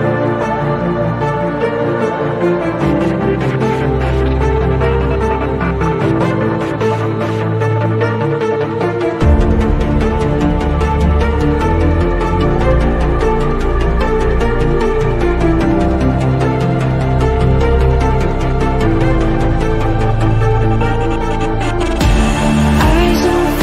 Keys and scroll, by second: 0.0-0.1 typing.